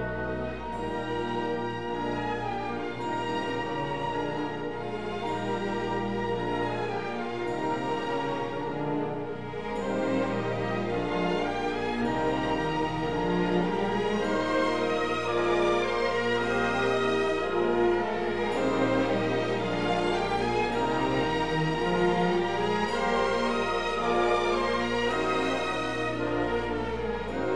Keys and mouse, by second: 2.5 alt+z, 5.1 Tab, 6.4 s, 6.6 z, 8.9 shift+click, 9.2 g, 9.4 z, 11.3 click, 12.2 right click, 16.4 click, 21.7 click, 22.0 g, 22.1 z, 23.8 click, 27.0 click.